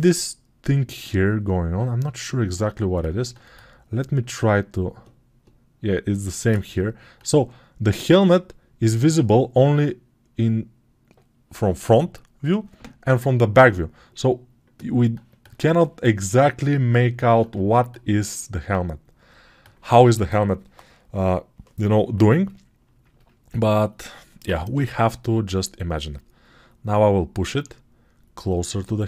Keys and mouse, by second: 24.6 g.